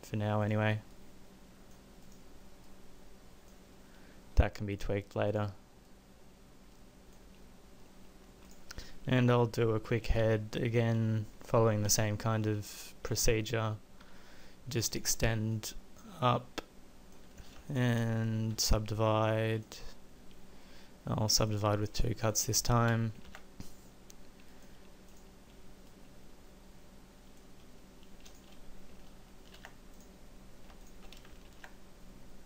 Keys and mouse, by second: 3.7 middle click, 5.8-7.1 middle drag, 7.9-9.0 middle drag, 10.6-11.9 middle drag, 11.9 KP_1, 14.0 e, 18.5 shift+w, 23.3 ctrl+a, 29.1 ctrl+a, 31.5 ctrl+a.